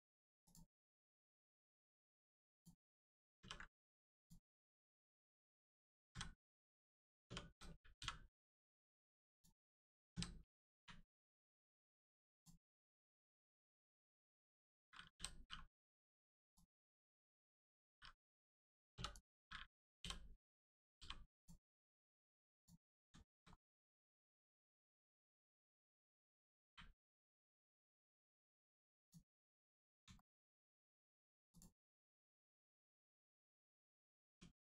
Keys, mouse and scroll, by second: 0.4 click, 0.9 middle click, 2.5 click, 3.3 ctrl+e, 4.1 click, 4.5 middle click, 5.1 Tab, 5.5 middle click, 7.2 Tab, 8.5 right click, 9.3 click, 10.1 a, 10.7 u, 11.6 click, 12.6 scroll up 1, 13.1 click, 13.9 click, 15.1 l, 15.7 click, 18.9 3, 19.1 click, 19.9 l, 20.9 g, 21.3 click, 23.1 shift+middle click, 23.4 scroll up 1, 25.4 right click, 26.6 u, 28.9 click, 30.1 shift+middle click, 30.3 scroll down 1, 30.4-31.2 scroll up 1, 31.5 click, 31.8 middle click, 32.2 scroll up 1, 32.5 middle click, 33.4 scroll down 1, 33.9 Tab, 34.5 click.